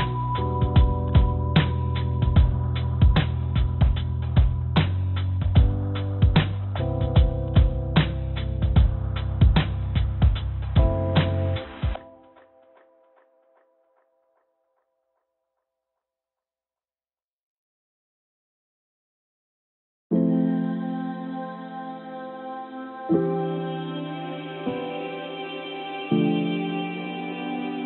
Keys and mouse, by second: 1.0 click, 9.2 click, 11.3 click, 15.3 click, 16.5 click, 17.9-21.5 drag, 23.1 Tab, 24.4 Tab, 25.4 click, 27.5 click.